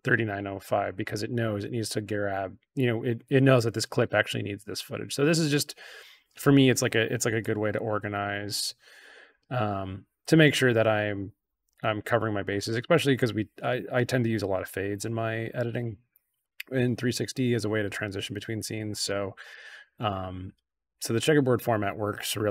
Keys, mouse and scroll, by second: 0.9-5.5 drag, 7.3 click, 9.2-10.9 drag, 11.6 click, 12.7-15.5 drag, 16.3-19.4 drag.